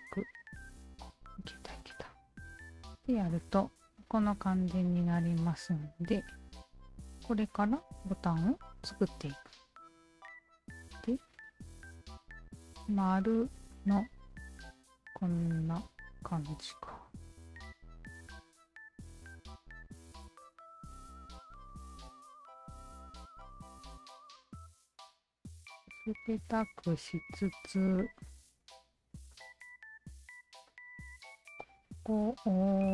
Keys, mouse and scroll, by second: 0.1 alt+click, 1.4-2.3 alt+drag, 2.6-3.1 alt+right drag, 3.1 alt+drag, 3.5 alt+middle click, 3.8 alt+right drag, 4.3-7.6 alt+drag, 8.1 alt+click, 9.3 alt+click, 11.2 alt+click, 18.1 click, 18.8-19.4 alt+drag, 19.9 Tab, 20.4 alt+click, 21.5 d, 21.7 click, 22.4 alt+right click, 23.0 alt+middle click, 23.6 r, 24.4-26.4 drag, 26.8 alt+click, 27.3 alt+click, 27.6 q, 28.1 alt+click, 28.3 alt+click, 29.2 alt+click, 29.3 alt+click, 30.3 r, 30.7 alt+click, 32.1 alt+click, 32.6 alt+right click.